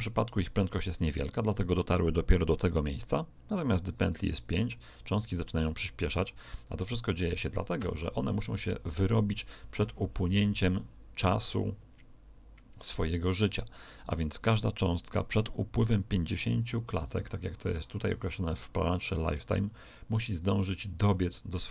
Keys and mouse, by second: 4.3-6.8 drag, 7.0 click, 16.9-19.2 middle drag.